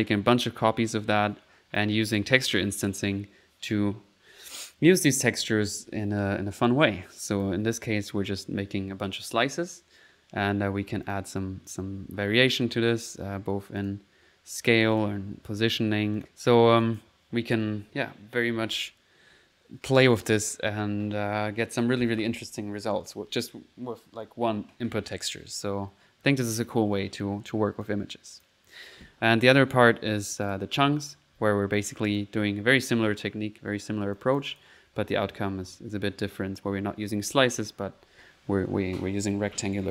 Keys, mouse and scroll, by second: 1.8 click, 2.3 click, 3.5 middle click, 7.0 click, 10.0 middle click, 11.0 click, 12.8 click, 13.8 click, 14.9 click, 16.1 click, 16.3 click, 16.8 click, 19.5 middle click, 20.0 click, 27.8 click, 29.1 middle click, 30.4 click, 31.8 click, 32.4 click, 33.5 middle click, 34.1 click, 34.6-35.6 typing, 37.2-38.0 typing, 39.4-39.9 typing.